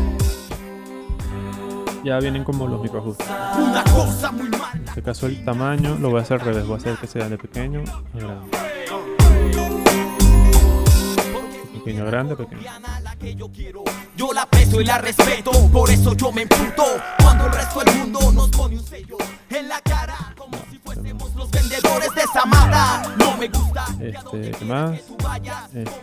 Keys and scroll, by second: 0.4 0, 4.6 space, 13.0 0, 18.9 0, 20.1 space.